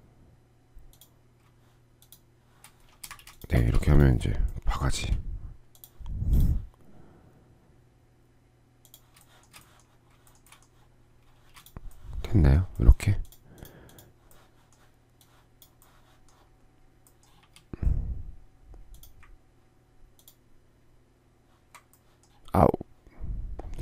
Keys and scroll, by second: 2.7 space, 3.1 Escape, 3.5 Escape, 4.5 9, 10.8 shift+space, 16.9 s.